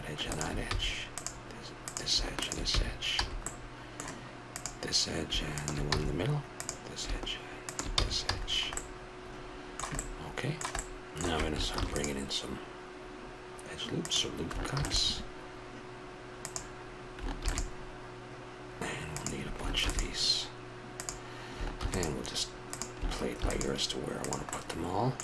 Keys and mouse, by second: 0.7 f, 2.7 f, 3.2 a, 5.9 f, 6.7 a, 7.5 click, 7.9 f, 8.3 a, 9.5 middle click, 11.7 ctrl+r, 14.7 ctrl+r, 17.3 ctrl+r, 19.8 ctrl+r, 21.8 ctrl+r, 23.3 ctrl+r, 24.5 middle click.